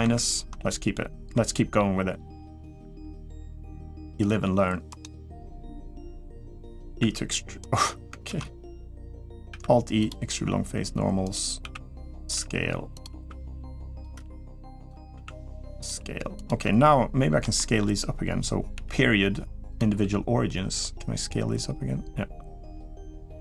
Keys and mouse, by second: 0.2 ctrl+KP_Subtract, 1.1 middle click, 2.4 middle click, 2.8 s, 6.8 e, 8.1 ctrl+z, 9.9 alt+e, 11.4 s, 12.1 g, 12.9 s, 13.9 g, 14.9 s, 15.7 g, 17.3 shift+middle click, 19.8 s.